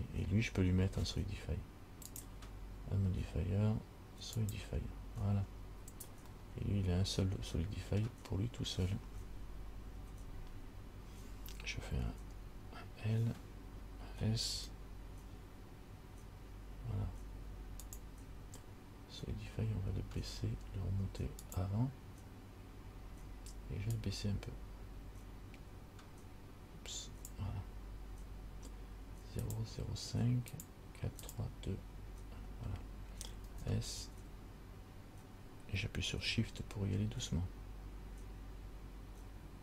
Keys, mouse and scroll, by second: 2.4 click, 5.7-6.5 scroll up 3, 6.6 middle click, 10.2 Tab, 12.5 l, 14.7 s, 21.6 click, 24.2 click, 29.7 click, 30.7 click, 31.4 click, 33.7 s.